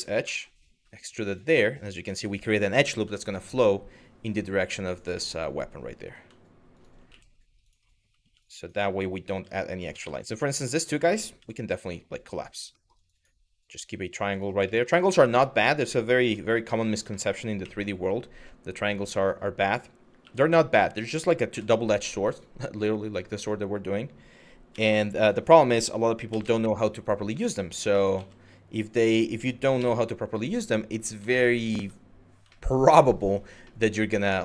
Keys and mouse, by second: 0.9 click, 2.8 shift+middle click, 4.8 shift+middle click, 5.7 click, 6.4 shift+click, 6.7 f, 7.3 click, 7.9 1, 8.1 click, 9.4 click, 9.8 shift+middle click, 10.3 click, 11.9 m, 12.4 shift+middle click, 12.8 click, 13.4 g, 13.9 click, 14.4 shift+middle click, 15.3 click, 16.1 2, 16.4 click, 16.8 shift+middle click, 17.2 e, 18.4 click, 19.8 1, 20.2 click, 21.1 m, 22.7 click, 24.3 s, 25.9 z, 26.2 Return, 27.5 s, 27.8 z, 28.7 o, 29.4 0, 30.1 click, 31.0 shift+middle click, 31.4 Tab, 32.2 shift+middle click, 33.4-34.4 middle drag.